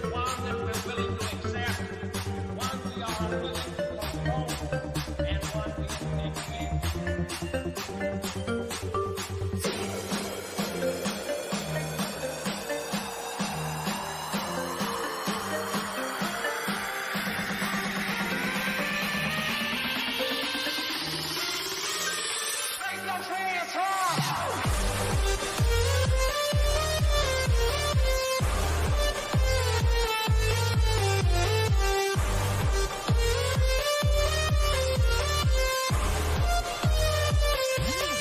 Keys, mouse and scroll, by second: 2.9 scroll up 1, 3.2 scroll down 1, 5.1 click, 7.0-7.9 scroll up 1, 8.9 click, 9.6 scroll down 1, 9.9 middle click, 10.9-11.4 scroll down 1, 11.9-14.3 middle drag, 14.3 click, 15.5-17.8 middle drag, 17.8 click, 21.4 scroll up 1, 22.3 middle click, 23.1 scroll down 1, 26.1-26.7 scroll down 1, 26.7 middle click, 27.6-28.0 scroll down 1, 34.0-34.6 scroll up 1, 36.6 click.